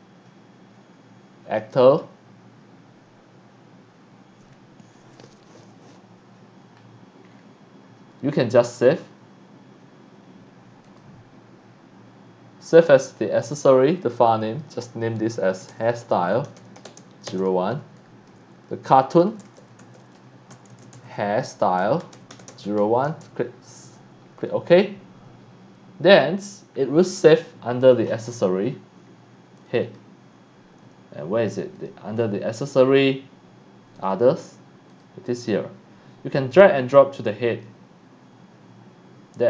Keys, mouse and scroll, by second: 1.5 click, 7.3 scroll down 2, 10.8 click, 14.0 click, 14.4 click, 15.5-18.5 typing, 19.5-23.3 typing, 27.9 click, 29.7 click, 31.7 click, 32.1 scroll down 1, 34.0 click, 34.1 click, 34.9 click, 36.3-37.6 drag.